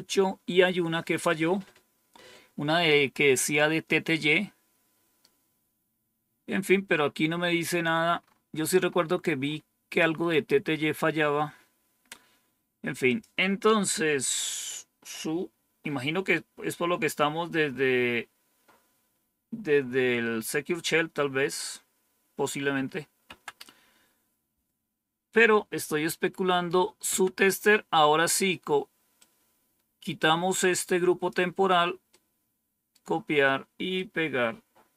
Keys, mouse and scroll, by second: 8.2-10.2 scroll up 2, 10.2-11.9 scroll down 1, 13.0 click, 13.9 Home, 23.2 End, 25.3 Home, 27.0 Down, 29.1-31.2 drag, 32.0 right click, 33.9-34.9 right drag.